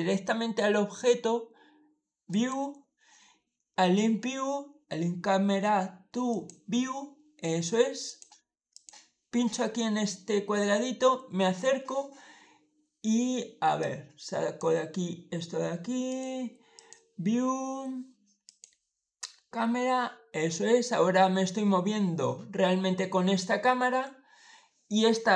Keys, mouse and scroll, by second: 2.2 click, 6.2 click, 7.9 click, 8.6 click, 10.0-10.5 scroll up 1, 10.5 middle click, 13.7 click, 15.9 click, 16.6 click, 18.3 click, 19.3 scroll down 1, 19.4-20.1 scroll up 1, 20.1 scroll up 1, 20.3-21.0 scroll down 3.